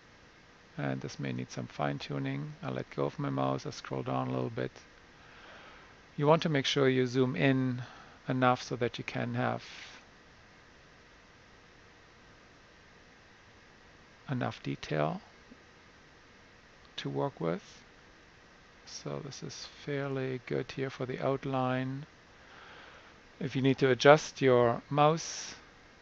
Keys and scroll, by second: 24.4-25.9 typing.